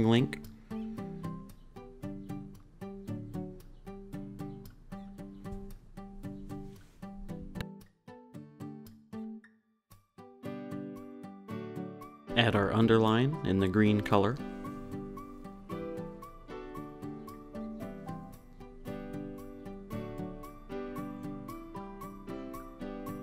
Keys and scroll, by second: 5.2 super+c, 6.5 super+v, 7.4 shift+Down, 8.6 shift+Left, 9.7 Down, 10.0 Right, 13.2 shift+Right, 13.5 shift+Left, 13.7 Right, 14.1 Left, 16.4 Left, 16.7 Right, 20.9 Up.